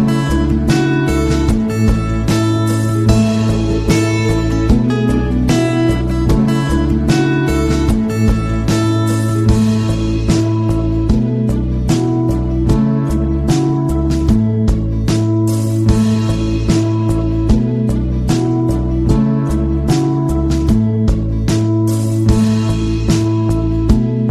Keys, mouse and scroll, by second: 0.6 click, 4.1-7.0 typing, 13.2 click, 15.6-16.2 scroll down 1, 16.7 click, 18.0-18.3 scroll down 1, 18.8 scroll down 1, 19.8 click, 23.2 scroll down 2, 23.8 click.